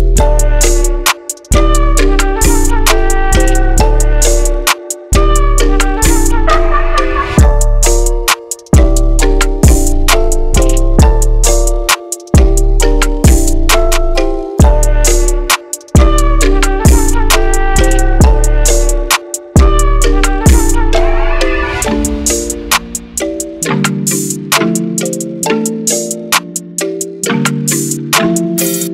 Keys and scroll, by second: 3.8-4.7 typing, 8.5-9.2 typing, 9.3 Return, 11.0-12.8 typing, 14.4-15.2 typing, 18.1-18.8 typing, 20.3-21.0 typing.